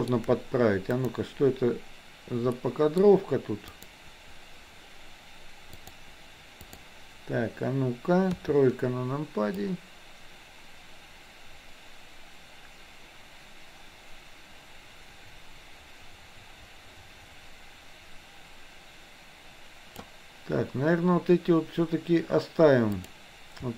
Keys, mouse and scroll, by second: 1.0 click, 2.6 middle click, 3.7 click, 5.8-6.8 drag, 8.3 KP_3, 9.7-20.1 drag, 23.0 click.